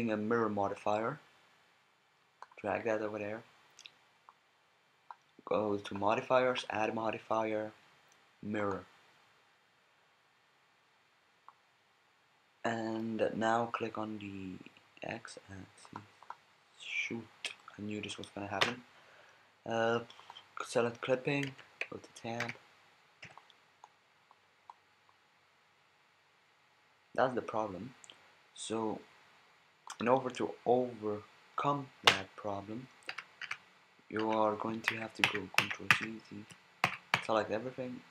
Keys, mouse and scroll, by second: 0.8-2.4 drag, 4.3 click, 8.1 click, 11.4-13.3 drag, 15.8 click, 18.6 KP_1, 21.5 Tab, 22.4 a, 23.2 b, 25.3-25.9 drag, 30.1-31.4 middle drag, 32.1 KP_1, 33.1 a, 33.4 a, 34.2 a, 34.9 ctrl+z, 35.3 ctrl+z, 35.6 ctrl+z, 35.9 ctrl+z, 36.8 a, 37.1 a.